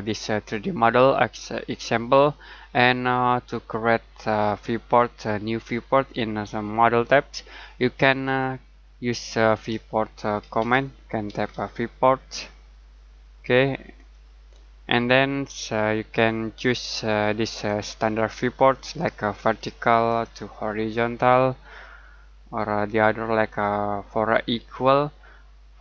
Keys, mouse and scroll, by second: 8.2 click, 9.7-11.5 typing, 13.9 click, 17.4 click, 20.0 click, 23.3 click.